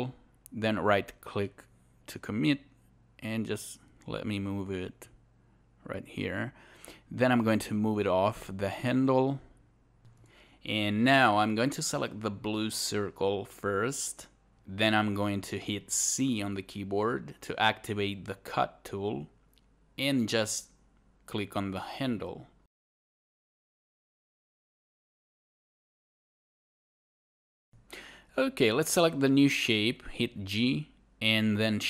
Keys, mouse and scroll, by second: 1.7 w, 2.4-5.6 drag, 9.4 alt+right click, 9.5 alt+click, 20.9 alt+c, 21.0 click, 24.8 right click, 25.0 alt+click, 29.8 alt+w, 30.8 click, 31.7 alt+click.